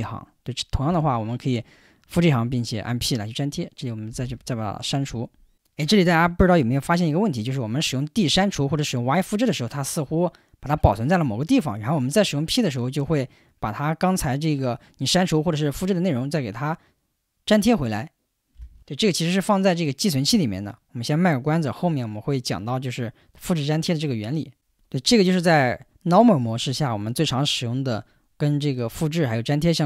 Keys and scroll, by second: 0.9 k, 4.1 typing.